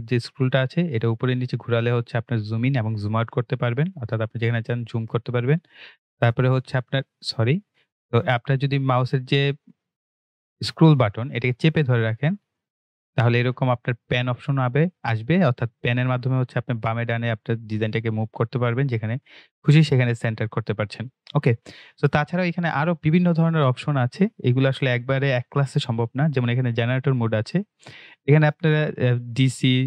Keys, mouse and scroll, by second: 0.2 scroll up 1, 0.9 scroll down 1, 1.6-2.0 scroll up 1, 3.3-5.0 scroll down 1, 5.0 right click, 6.1 click, 6.2 right click, 7.8-10.1 middle drag, 10.1 scroll down 1, 10.5 scroll up 1, 11.4-20.8 middle drag, 20.8 click, 26.6 click.